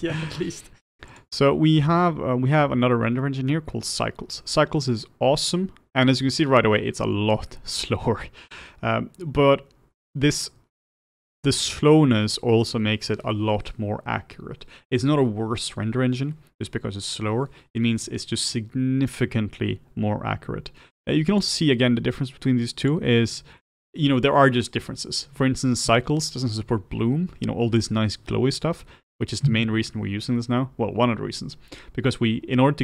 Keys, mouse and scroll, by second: 4.8 click, 23.0-32.8 drag.